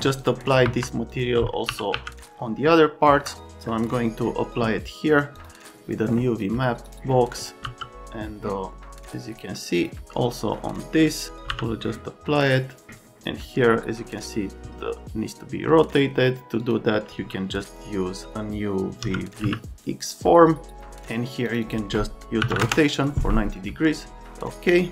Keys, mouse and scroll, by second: 0.2 middle click, 0.6 F3, 1.7 r, 1.9 z, 7.6 n, 19.0 x, 19.4 q, 22.4 KP_9, 22.5 KP_0, 22.6 KP_Enter.